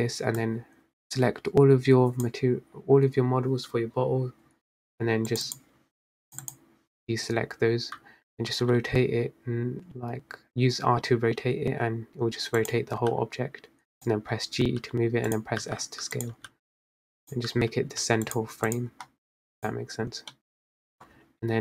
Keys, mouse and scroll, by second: 0.8 click, 5.5 shift+click, 5.6 shift+click, 6.4 shift+click, 6.8 shift+click, 8.4 r, 13.3 g, 15.0 g, 15.9 s, 16.7 g, 18.2 g, 19.4 click, 20.1 click, 20.8 middle click, 21.2-21.6 scroll down 6.